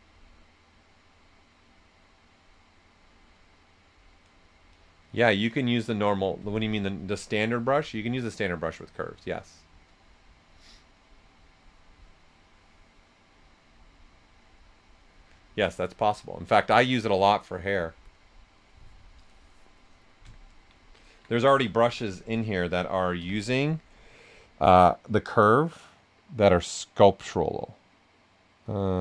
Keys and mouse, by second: 20.7 typing, 20.9 alt+right click, 21.8 b, 25.2 c.